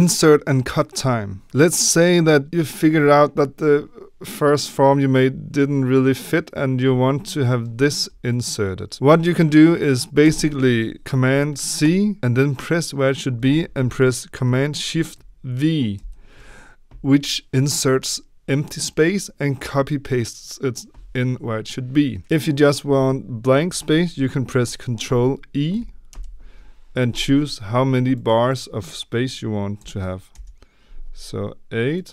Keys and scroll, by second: 10.2 ctrl+c, 15.9 ctrl+shift+v, 26.0 ctrl+i, 29.7 8, 31.6 Return.